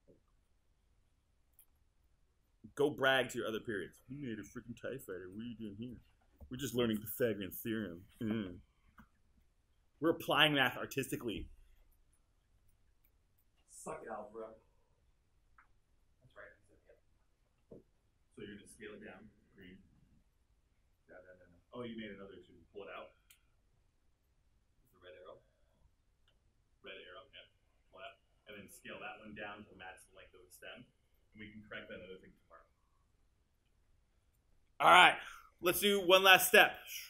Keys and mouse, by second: 1.0 alt+click.